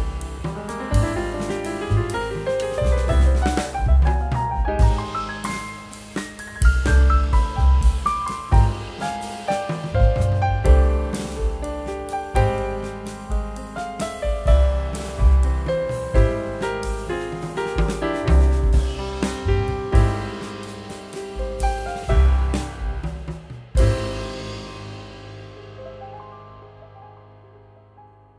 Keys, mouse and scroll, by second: 12.2 space, 15.1 double click, 16.1 3, 16.3 Return, 19.1 space.